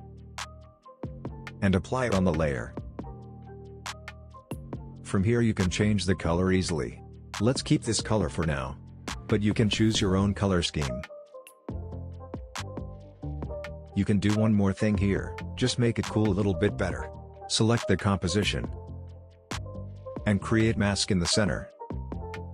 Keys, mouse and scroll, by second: 0.0-1.1 typing, 2.5-3.8 drag, 8.7 click, 11.3 space, 13.8-14.6 scroll down 1, 14.6-15.1 scroll up 1, 15.1 click, 22.3-22.5 drag.